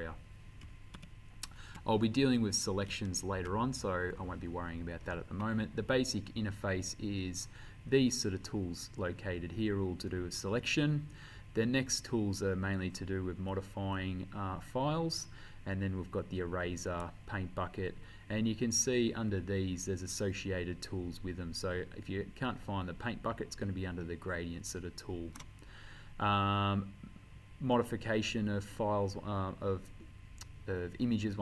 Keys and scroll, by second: 1.0 ctrl+a, 3.1 ctrl+d.